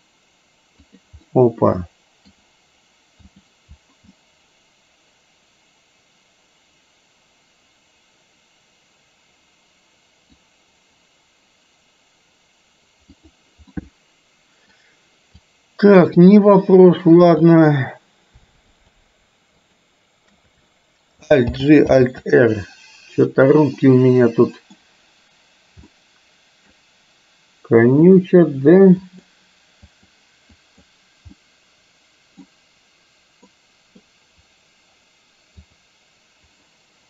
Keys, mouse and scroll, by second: 1.3-2.4 middle drag, 3.4 click, 4.2-10.4 middle drag, 13.7-14.7 middle drag, 15.4-17.7 drag, 18.8 shift+click, 19.8 shift+click, 21.6 alt+g, 22.1 alt+r, 23.8-24.8 middle drag, 26.1-26.8 middle drag, 28.2 click, 29.3 click, 29.9 click, 30.7 click, 31.4-32.4 middle drag, 33.6 middle click, 35.7 click.